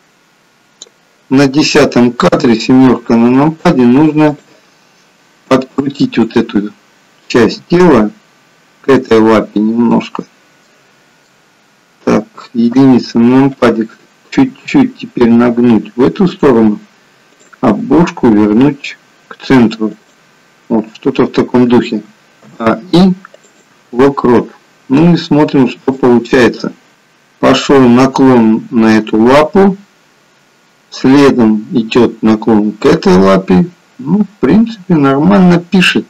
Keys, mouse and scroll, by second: 2.3 KP_7, 4.2 click, 6.6 click, 7.8 r, 9.9 middle click, 12.8 KP_1, 14.8 r, 17.5 click, 18.1 r, 22.1 a, 22.5 i, 25.9 click.